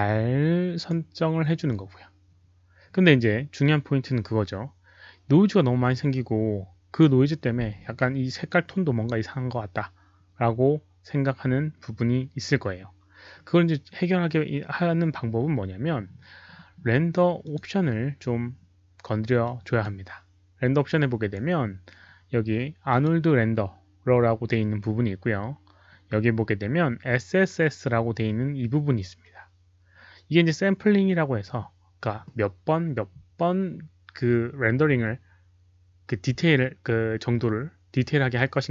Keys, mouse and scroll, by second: 0.7 click, 0.8 Return, 0.8 KP_3, 0.8 KP_Decimal, 17.4 click, 19.4-19.7 drag, 22.8 click, 28.2 click.